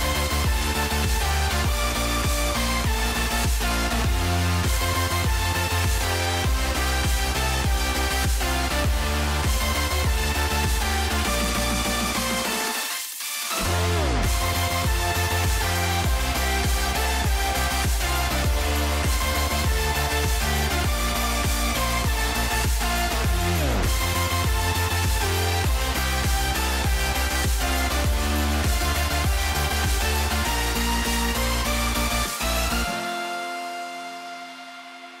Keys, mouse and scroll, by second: 0.7 g, 2.3 click, 3.3 g, 7.5 click, 8.4 g, 12.5 click, 15.5 click, 17.0 s, 19.9 right click, 21.1 Tab, 22.2 middle click, 24.7 Tab, 25.6 Tab, 26.8 s, 29.0 a, 29.6 s, 34.0 Tab.